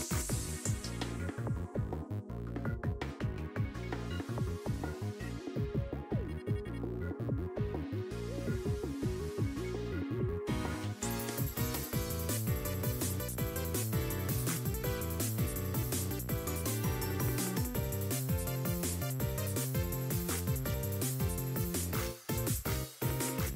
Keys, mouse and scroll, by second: 0.3 click, 3.3 scroll down 4, 3.8 scroll up 1, 4.4 r, 10.7-13.0 drag, 13.1 r, 15.4-15.9 scroll down 3, 15.9-16.8 scroll up 2, 17.2-19.2 drag, 19.8-20.2 scroll down 2, 20.0 middle click, 20.4-21.0 scroll up 1, 21.0 scroll up 1, 21.0 r, 22.1 r.